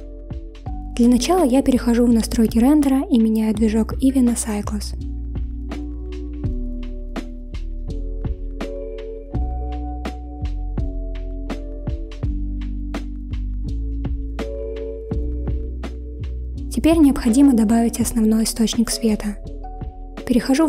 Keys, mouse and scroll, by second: 2.4 click, 5.7-8.9 drag, 12.2 click.